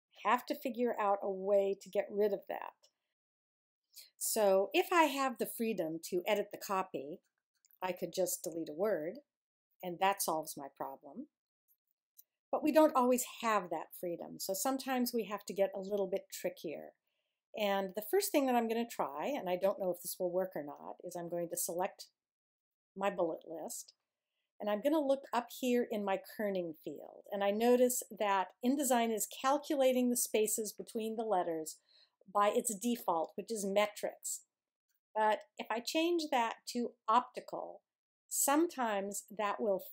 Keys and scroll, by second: 8.8 BackSpace, 12.0 super+z.